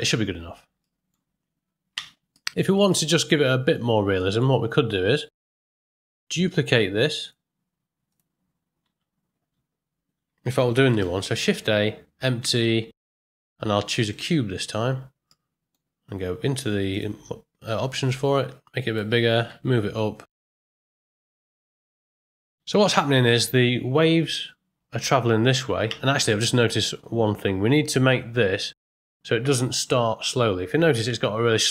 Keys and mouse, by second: 0.8 ctrl+middle click, 1.9 space, 2.3 middle click, 3.0-3.7 ctrl+middle drag, 4.2 shift+middle drag, 5.1 shift+Left, 7.2 click, 8.1 click, 10.9 shift+a, 15.4 middle click, 16.9 click, 18.0 click, 19.3 g, 21.3 middle click, 21.9 ctrl+middle click, 22.4 space, 25.8 space, 26.3 middle click, 29.9 click, 31.0 space.